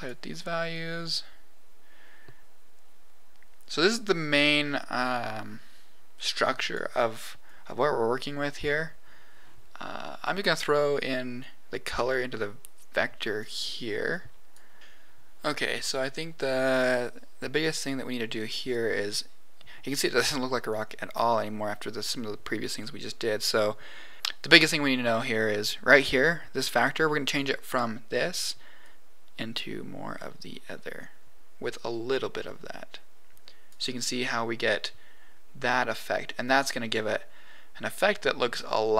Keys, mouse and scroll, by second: 0.7-2.2 drag, 7.5 click, 11.3-13.4 drag, 14.1 click, 14.8 ctrl+z, 15.9 scroll down 1, 16.7-17.8 middle drag, 18.1-18.5 scroll down 3, 21.0 scroll up 2, 22.1-22.7 scroll up 2, 22.7 middle click, 24.1 click, 26.2 click, 28.7 click, 32.0-33.6 drag, 34.1-38.7 middle drag.